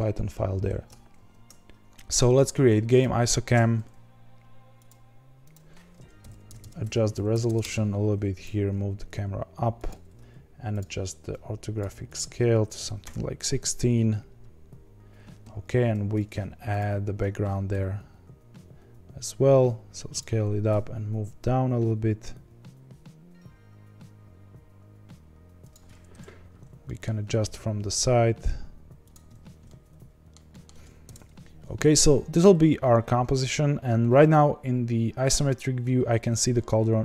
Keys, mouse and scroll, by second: 0.1 h, 1.1 ctrl+z, 1.2 ctrl+x, 2.9 click, 6.8 KP_0, 7.5 KP_0, 8.3 g, 11.3-16.7 drag, 16.7 shift+a, 17.7 s, 20.6 g, 26.1 KP_1, 26.8-27.2 shift+middle drag, 27.2-27.8 scroll up 6, 27.8 g, 29.3-29.6 scroll down 6, 29.6-31.0 middle drag, 31.0 KP_0, 31.8-36.1 scroll down 1, 36.1-37.0 scroll down 1.